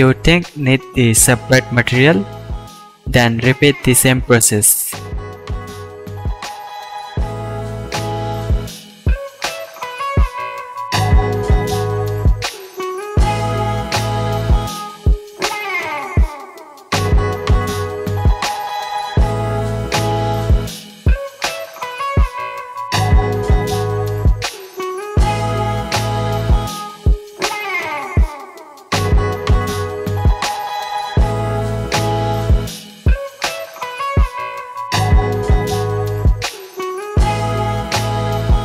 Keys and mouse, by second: 3.6 middle click, 5.4 middle click, 5.7-8.3 shift+drag, 7.1-8.3 middle drag, 7.1-8.3 right drag, 8.3 Left, 9.1-10.6 middle drag, 10.6 click, 11.1-14.1 drag, 15.1-16.6 drag, 16.9 h, 17.4-18.6 shift+drag, 17.9 ctrl+l, 18.7 alt+click, 18.8 alt+a, 18.8 click, 19.3 drag, 19.4 click, 19.6 alt+h, 19.8 alt+a, 20.0-20.4 shift+drag, 20.5-20.8 drag, 20.8 middle drag, 21.1 drag, 22.4-25.6 middle drag, 25.8-28.0 shift+drag, 29.0 Left, 29.8-32.5 middle drag, 32.7 shift+a, 36.8 shift+a, 37.6-38.6 drag, 37.6 middle drag, 37.6 right drag, 38.0-38.6 middle drag, 38.0-38.6 right drag.